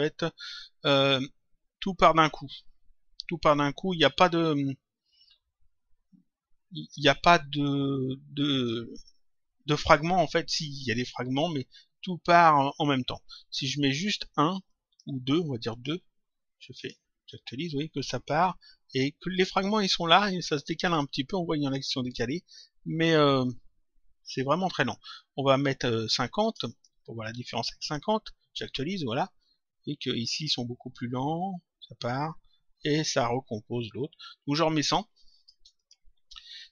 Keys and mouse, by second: 14.6 click, 25.4 click, 26.6 click, 27.8 click, 34.6 click, 35.8 click.